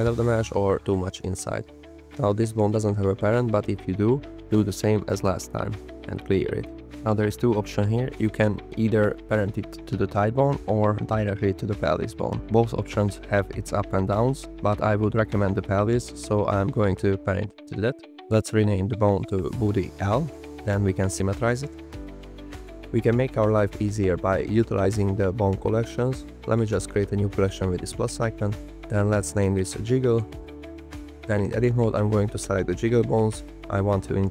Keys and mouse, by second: 3.8-6.8 drag, 10.0 shift+drag, 18.8-20.4 drag, 20.0 o, 21.3-22.4 drag, 24.6 click, 27.2-30.7 drag, 29.0 g, 31.0 shift+h, 34.1 shift+click.